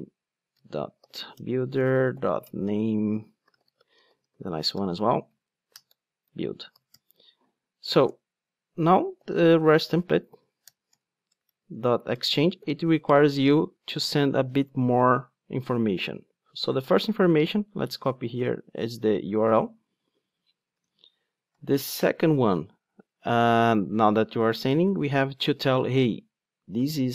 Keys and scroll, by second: 2.7 Return, 10.6 Return, 18.7 Return, 18.8 super+c, 20.0 super+v.